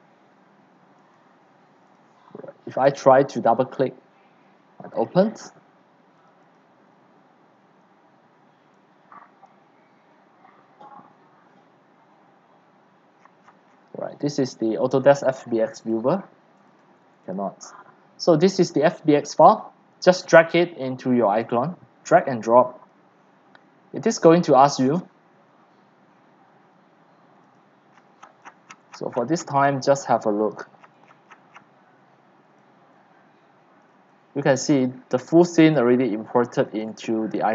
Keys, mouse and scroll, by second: 2.9 click, 3.0 click, 5.1 click, 6.6 click, 9.7 click, 13.2-13.6 scroll down 15, 13.6-15.4 middle drag, 13.6 scroll, 15.4 click, 17.5 click, 18.9 click, 19.6 click, 20.1 click, 20.7-23.8 drag, 27.4 click, 27.8 click, 28.0-29.7 scroll, 28.8 middle click, 29.7-30.1 scroll down 1, 30.5 click, 30.8-31.7 scroll, 31.2 click, 31.3 click, 31.3 click, 31.7 scroll down 1, 31.8 scroll, 31.9-32.5 scroll down 10, 32.7-37.4 typing, 33.9 click, 35.4 click, 35.6 click, 36.8 click, 37.3 click.